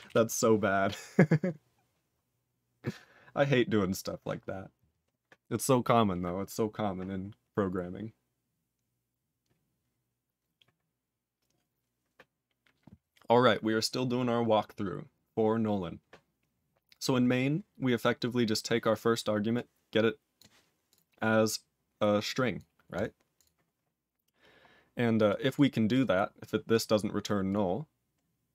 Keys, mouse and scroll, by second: 0.0 ctrl+s, 3.6-4.9 scroll down 1, 14.7-15.7 scroll up 4, 15.7 scroll down 7, 16.7-19.5 scroll up 10, 19.5 click, 20.3 click, 20.9 click, 21.8-22.3 scroll down 1, 22.3 click, 22.5 click, 22.9 click, 23.3 click, 24.1 scroll down 3, 25.2 click, 25.5 click, 25.9 click, 26.3 click, 26.6 click, 27.4 click, 28.1-28.5 scroll down 2.